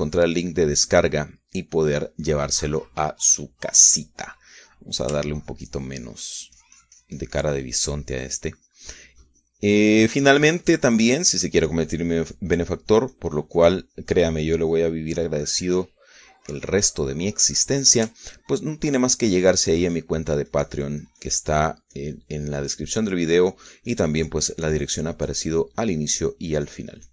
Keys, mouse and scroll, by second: 0.0-2.7 ctrl+drag, 2.7 middle click, 3.0 middle click, 3.6 middle click, 4.3 middle click, 5.2-7.0 middle drag, 7.3-17.1 ctrl+drag, 17.4 ctrl+middle click, 18.3-19.9 middle drag, 20.6-27.1 ctrl+drag.